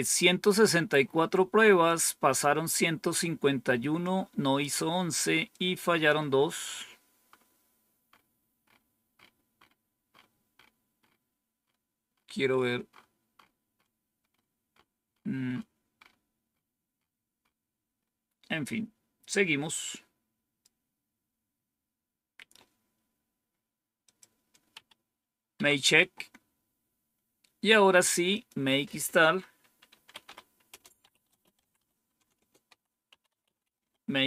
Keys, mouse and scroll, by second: 1.7 click, 3.9 click, 5.4 click, 13.2 scroll up 2, 17.8 scroll down 2, 19.8 click, 23.9 click, 24.7 Up, 25.4 Down, 26.5 scroll down 1, 28.2 click, 29.8-34.2 typing.